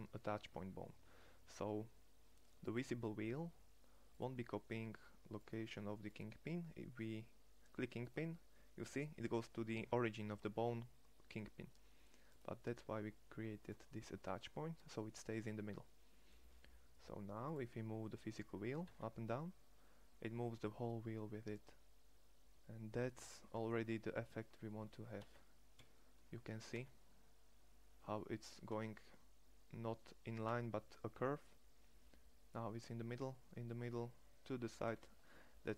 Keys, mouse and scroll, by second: 10.8-12.3 drag, 14.6-17.6 drag, 18.7 g, 25.0 g, 26.6 g, 30.3 g.